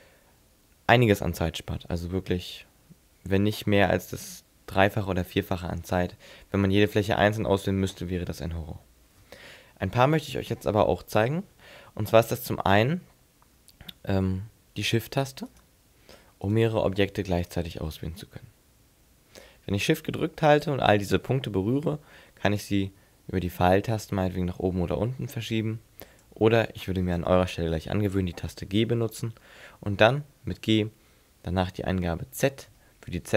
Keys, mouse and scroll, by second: 15.5 shift+right click, 16.5 shift+right click, 17.5 shift+right click, 22.6 click, 29.0 g.